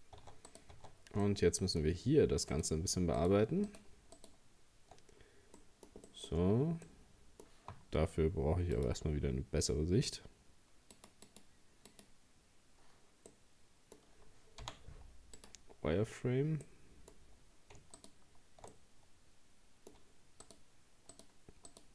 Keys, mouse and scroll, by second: 0.2 Tab, 0.5 right click, 0.8 Tab, 1.2-2.5 middle drag, 2.5 right click, 3.2 shift+right click, 3.7 shift+right click, 4.2 shift+right click, 5.6 middle click, 6.3-6.7 shift+scroll up 2, 6.9-8.8 middle drag, 8.8-13.3 drag, 13.3-14.6 middle drag, 14.6 z, 16.2-16.7 scroll down 1, 16.7 middle click, 17.1-17.5 scroll up 2, 18.0 shift+right click, 18.7-20.5 middle drag, 20.5 shift+right click, 21.1 shift+right click, 21.7 shift+right click.